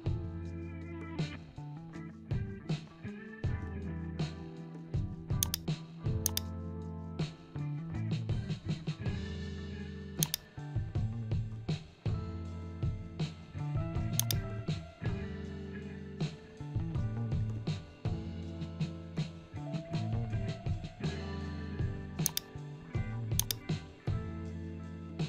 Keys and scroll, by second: 0.1 ctrl+0.